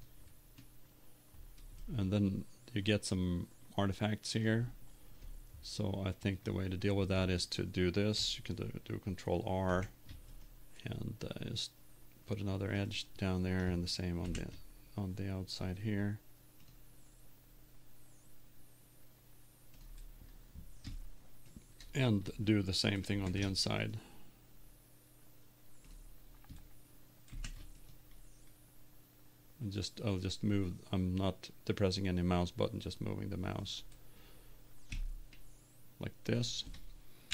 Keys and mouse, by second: 0.2-1.5 drag, 1.5-2.9 middle drag, 3.5 middle click, 9.8 ctrl+r, 12.9-14.2 drag, 14.2 ctrl+r, 19.9-21.6 drag, 21.6 middle click, 22.1 click, 23.2 ctrl+r, 25.9-27.2 drag, 27.3 ctrl+r, 27.5 click, 35.4-37.1 drag.